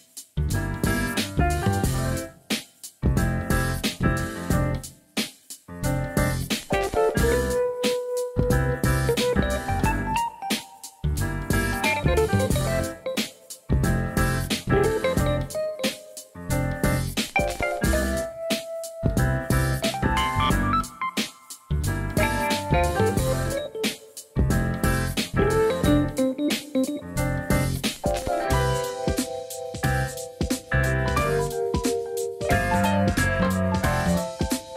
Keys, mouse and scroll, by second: 2.0 alt+z, 2.4-5.1 middle drag, 5.7 KP_1, 6.1 alt+z, 6.7 shift+middle click, 17.8 shift+middle click, 18.2 alt+z, 20.9 Tab, 21.4-22.7 middle drag, 23.1 Tab, 23.3 middle click, 25.2 KP_1, 26.5 middle click, 27.8 click, 28.2 shift+click, 28.4 shift+click, 29.2 KP_1, 31.5 e, 32.7 click, 34.0 d.